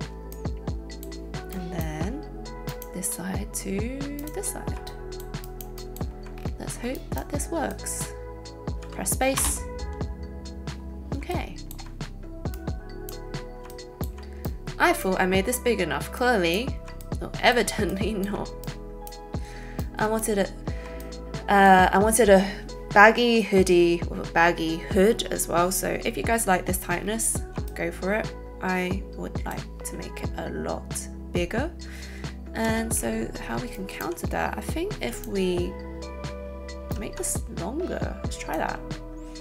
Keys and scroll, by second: 9.3 alt+space, 32.7 space, 34.9 a.